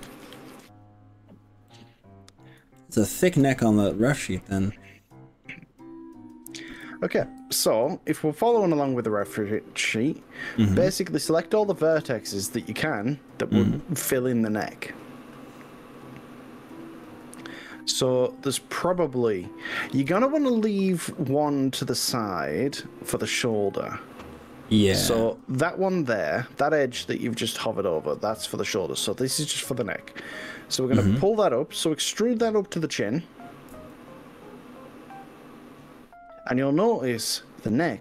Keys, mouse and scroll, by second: 1.7 middle click, 2.8 shift+middle click, 3.7-4.2 scroll up 3, 14.8-16.4 middle drag, 16.7-18.2 middle drag, 20.0 KP_1, 26.0-27.6 drag, 33.8 e.